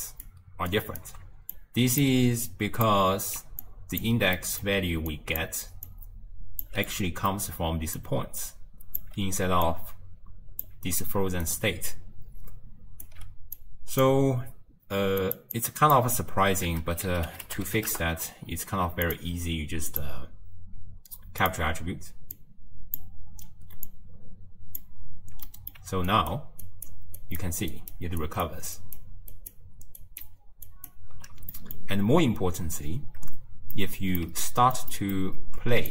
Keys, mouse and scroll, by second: 0.1 ctrl+alt+right click, 0.7 ctrl+alt+right click, 1.6 click, 2.5 click, 3.2 ctrl+x, 3.7 click, 4.4-5.2 middle drag, 5.2 click, 5.6 d, 5.9 click, 6.7 d, 6.8 d, 6.9 middle click, 7.7 d, 8.0-9.0 drag, 9.0 d, 9.5 d, 9.7-10.7 drag, 10.7 d, 11.2 d, 11.5-13.1 right drag, 13.1 d, 13.2 d, 13.6 click, 15.3 click, 16.2-16.7 scroll up 2, 16.7 ctrl+a, 20.0-22.5 drag, 23.9 click, 25.5 middle click, 26.1 ctrl+alt+right click, 26.7 ctrl+alt+right click, 27.2 ctrl+alt+right click, 27.8 ctrl+alt+right click, 28.3 ctrl+alt+right click, 28.8 ctrl+alt+right click, 29.4 ctrl+alt+right click, 30.0 ctrl+alt+right click, 30.7 ctrl+alt+right click, 31.6-35.9 middle drag.